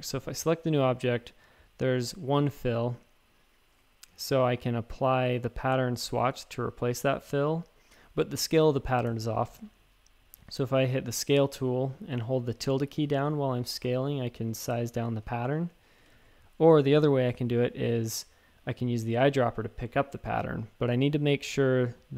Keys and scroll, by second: 9.0 s, 10.2 typing, 13.6-14.1 typing, 16.1 shift+super+a, 16.8 super+z, 17.3 typing, 21.3 typing.